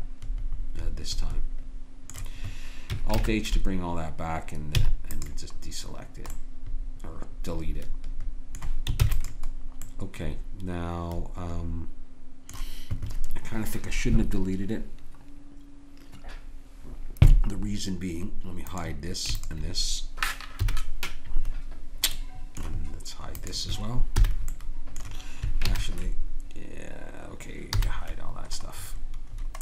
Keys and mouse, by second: 3.1 alt+h, 4.8 x, 5.7-6.7 middle drag, 9.0 ctrl+s, 9.6-11.7 middle drag, 18.7-24.2 drag, 20.6 h, 24.2 h, 25.7 alt+h, 27.7 h.